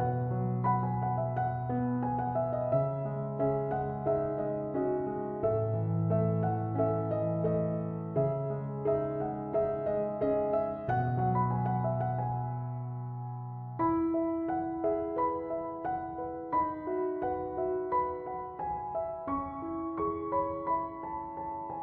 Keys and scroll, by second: 5.6 5, 5.9 Return.